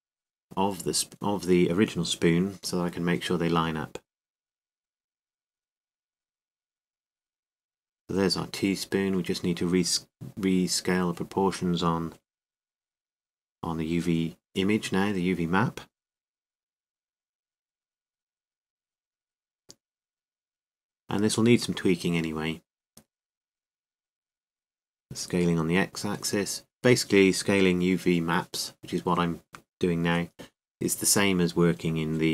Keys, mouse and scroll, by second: 11.8 s, 14.3-15.4 drag, 14.3 s, 17.8-18.8 drag, 17.8 s, 21.1 click, 21.1 g, 25.9 click, 25.9 s, 29.2 click, 29.2 g.